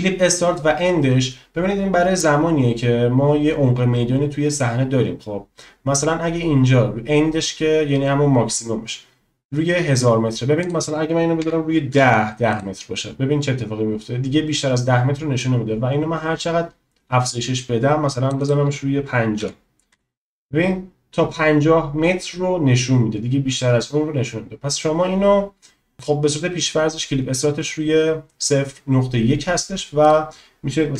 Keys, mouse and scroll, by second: 10.7-12.7 drag, 15.5-20.5 drag, 30.1-30.9 drag.